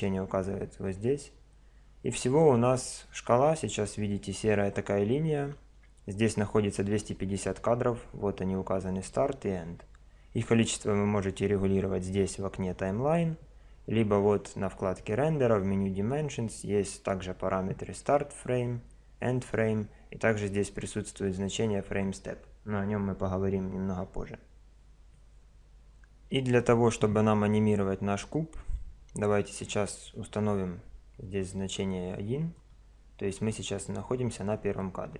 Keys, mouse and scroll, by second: 29.6 click.